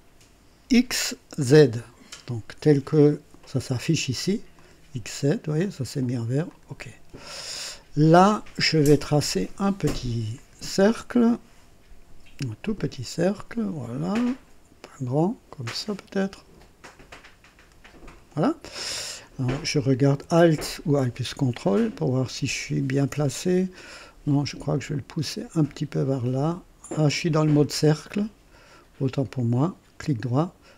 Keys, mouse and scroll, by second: 4.5 click, 6.4 click, 7.4-7.8 scroll up 2, 10.3 click, 12.6 click, 18.1 click, 21.2-23.0 ctrl+alt+drag, 23.2 scroll up 2, 23.7 ctrl+alt+right click, 25.9-29.1 drag, 29.6 right click.